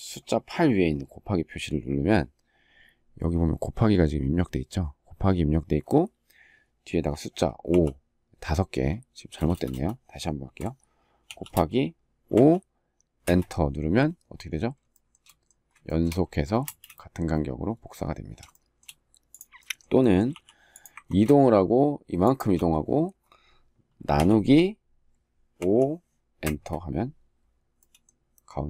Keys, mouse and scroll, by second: 9.1 BackSpace, 11.0 shift+8, 12.0 5, 13.0 Return, 14.6 shift+middle click, 15.6 shift+middle click, 16.4 space, 18.2 shift+middle click, 22.0 shift+click, 26.1 Return.